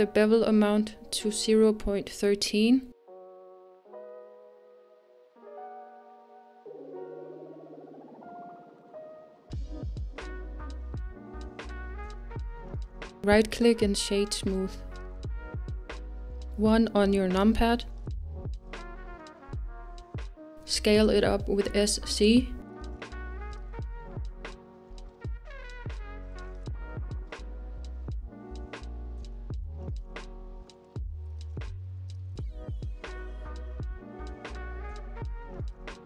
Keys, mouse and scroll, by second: 14.0-17.2 right drag, 17.2 KP_1, 19.0-20.5 scroll up 2, 20.5-21.3 scroll up 1, 21.3 s, 31.8 click, 32.3-33.1 scroll down 4, 33.1-36.0 middle drag.